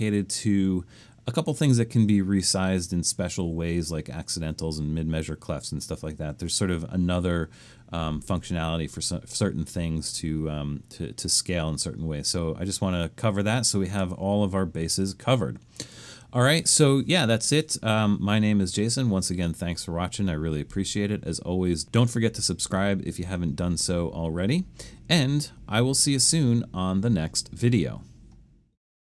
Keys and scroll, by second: 24.0-24.9 typing.